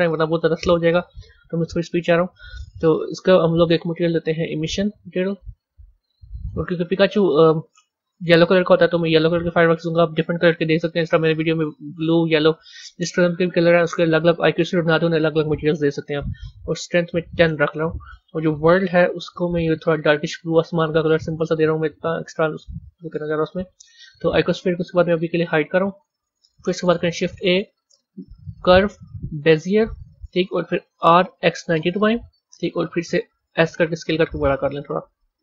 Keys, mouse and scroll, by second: 0.2-3.0 middle drag, 3.0 click, 3.9 click, 5.2-8.2 drag, 8.9 drag, 16.0-18.4 drag, 19.3 click, 25.4 click, 26.8 shift+a, 30.8 r, 33.4 s.